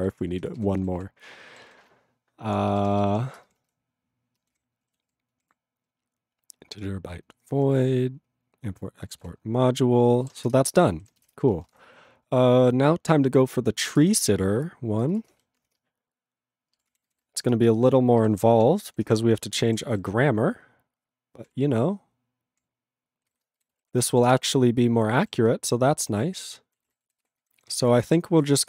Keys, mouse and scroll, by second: 0.1 ctrl+alt+b, 0.3 ctrl+alt+f, 0.6 ctrl+g, 1.0 ctrl+s, 1.9 ctrl+p, 2.7 ctrl+b, 2.8 ctrl+n, 3.0 ctrl+b, 3.1 ctrl+p, 3.4 ctrl+space, 3.5 ctrl+p, 3.8 BackSpace, 4.6 ctrl+/, 5.1 ctrl+s, 5.3 ctrl+p, 5.4 ctrl+e, 5.9 ctrl+p, 6.5 ctrl+p, 7.3 ctrl+n, 8.2 ctrl+p, 8.7 ctrl+p, 9.2 ctrl+s, 10.5 Return, 11.3 Return, 19.3 ctrl+Return, 19.7 ctrl+=, 20.1 ctrl+n, 21.5 ctrl+e, 21.5 ctrl+p, 24.4 ctrl+Return, 25.0 ctrl+=, 25.5 ctrl+n, 26.8 ctrl+e, 26.8 ctrl+n, 27.2 ctrl+s, 27.4 ctrl+n, 28.3 ctrl+p.